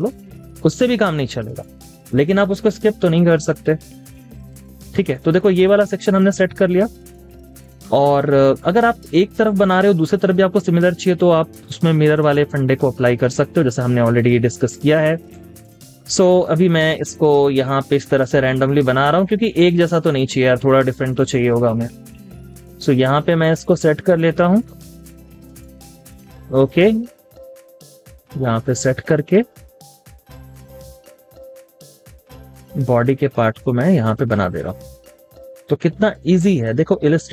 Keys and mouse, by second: 0.0 space, 1.5 double click, 1.9 space, 6.1 space, 6.3 double click, 6.5 space, 9.1 double click, 9.5 space, 15.7 double click, 19.1 double click, 21.5 space, 35.9 space, 36.0 double click.